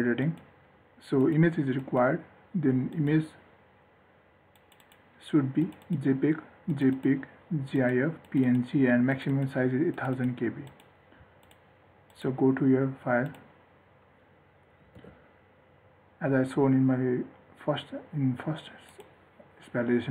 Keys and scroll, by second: 15.3 ctrl+r.